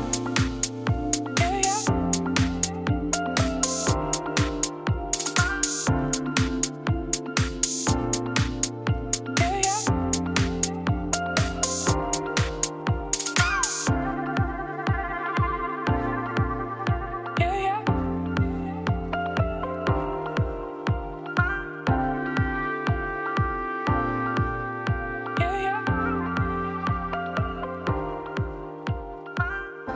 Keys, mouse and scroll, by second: 1.5 middle click, 1.8 scroll down 1, 2.0 Tab, 2.1 click, 2.2 middle click, 3.0 s, 3.9 middle click, 4.6 s, 6.2 middle click, 6.7 g, 9.2-10.4 middle drag, 11.2 click, 11.3 middle click, 11.5 s, 13.3 click, 13.4 middle click, 13.6 scroll down 2, 13.8 ctrl+s, 19.4 shift+a, 20.9 scroll down 1, 21.1 middle click, 21.8 scroll up 2, 22.1 middle click, 22.6 Tab, 22.9 g, 29.1 click, 29.4 2, 29.5 click.